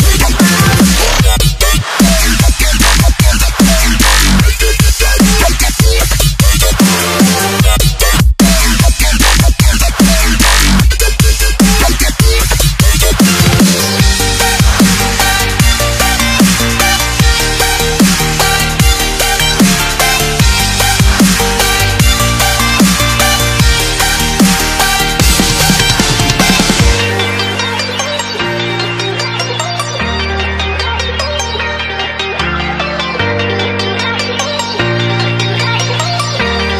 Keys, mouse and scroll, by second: 7.5 ctrl+s, 8.9 click, 18.2 scroll up 1, 20.9 click, 21.8 right click, 23.4 click.